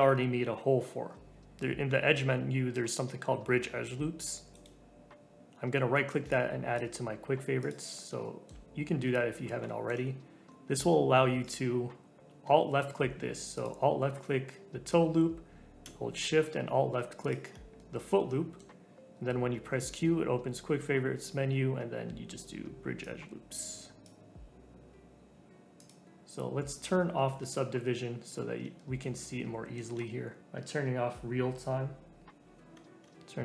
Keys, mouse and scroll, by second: 1.6-4.3 drag, 7.6 click, 7.9-8.2 scroll up 1, 8.2 shift+middle click, 8.8-9.6 scroll down 1, 9.6-11.4 shift+middle drag, 11.4 click, 13.5 alt+click, 17.2 alt+shift+click, 17.7-19.7 middle drag, 19.7 q, 26.2 click, 28.3-28.7 scroll up 1, 28.7-30.4 shift+middle drag, 33.2-33.4 shift+middle drag.